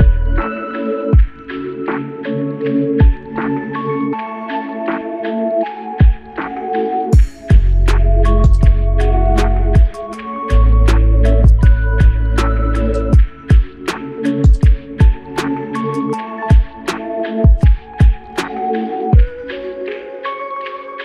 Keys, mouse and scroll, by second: 5.0 ctrl+click, 6.2 ctrl+click, 7.4 ctrl+click, 8.4 ctrl+click, 13.1 q, 14.9 ctrl+click, 19.0 ctrl+click.